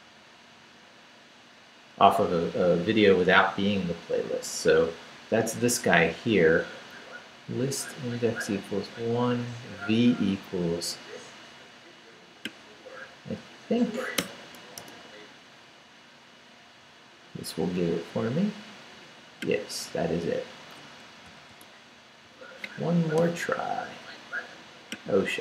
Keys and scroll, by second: 14.2 BackSpace, 14.8 Return, 21.3 super+c.